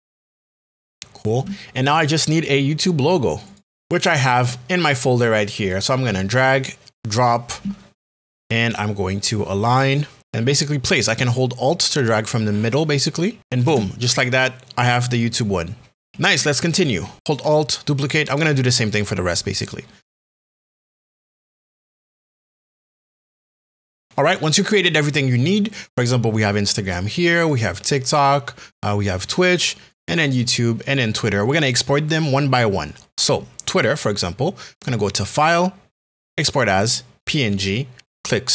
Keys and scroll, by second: 13.6 Return, 20.2 h, 20.8 Return, 21.0 Down, 21.1 Right, 21.2 Up, 21.2-22.5 typing, 22.9 Return, 23.2 Right, 23.6 Left, 23.7 Left, 23.8 Right, 23.9 Right.